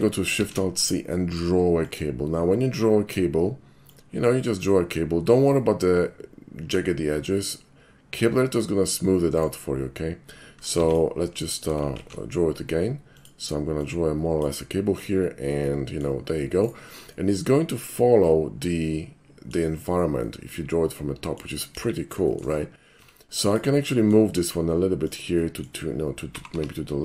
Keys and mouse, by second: 0.4 alt+shift+c, 1.9 click, 3.8-7.4 drag, 9.4-10.8 right drag, 10.8 x, 10.9 click, 12.0 alt+shift+c, 13.2 click, 13.8 click, 15.5 middle click, 16.6 right click, 17.1-19.5 middle drag, 20.3-21.4 middle drag, 22.2 shift+middle drag, 23.0 Tab, 23.5 click, 23.8 middle click, 25.1 click, 25.4 middle click, 26.4 g, 26.6 y.